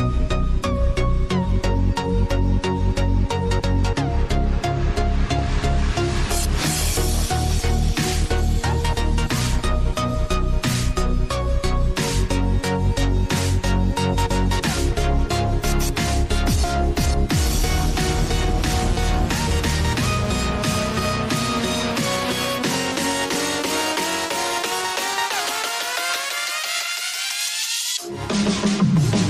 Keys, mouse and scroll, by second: 0.0-1.4 drag, 1.9 click, 2.8 Tab, 3.4-4.7 scroll down 1, 4.7 click, 5.6-6.5 scroll down 1, 6.5 click, 7.4 shift+d, 10.3 scroll up 2, 11.7 r, 15.6 s, 18.0 KP_7, 19.3 click, 22.1 click, 24.8 click, 27.3-28.4 drag.